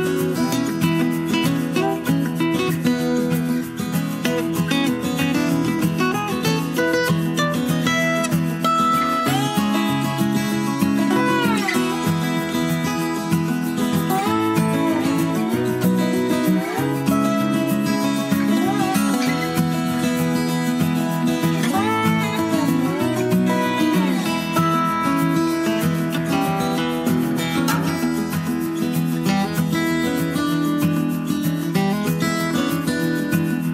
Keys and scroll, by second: 19.5 Escape, 20.4 Escape, 23.0 Escape.